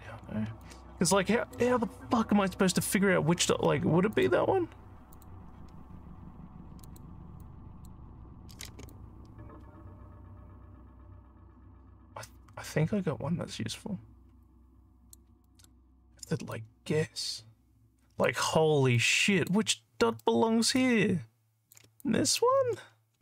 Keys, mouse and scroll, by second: 0.6 alt+click, 1.3 alt+middle click, 4.2 shift+click, 5.1 shift+click, 6.8 shift+click, 7.4 shift+click, 8.9-15.2 alt+drag, 15.5 alt+middle click, 16.5-18.2 alt+drag, 18.7 alt+scroll up 1, 19.0 alt+click, 20.2 alt+middle click, 20.8 alt+click, 22.1 shift+click.